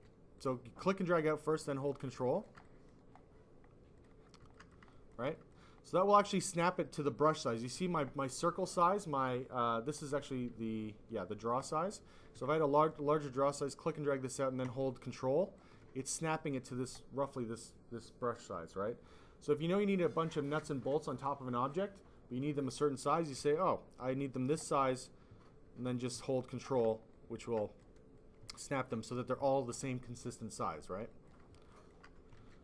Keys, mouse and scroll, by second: 0.0 ctrl+z, 0.3 click, 2.2 alt+click, 2.6 click, 3.9 click, 4.0 click, 4.5 alt+click, 4.9 alt+click, 5.3 click, 5.4 double click, 12.3 s, 12.4 click, 13.2 click, 23.3 s, 23.4 click, 24.9 click, 27.1 alt+click, 27.5 click, 28.1 click, 29.1 click, 31.0 click, 31.2 click, 31.5 alt+click, 32.4 ctrl+z.